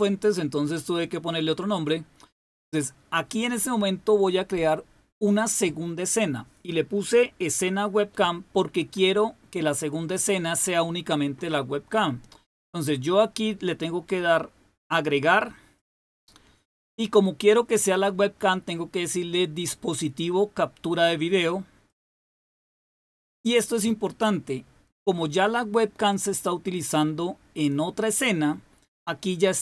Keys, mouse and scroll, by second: 0.7 click, 15.6 click, 21.7 click.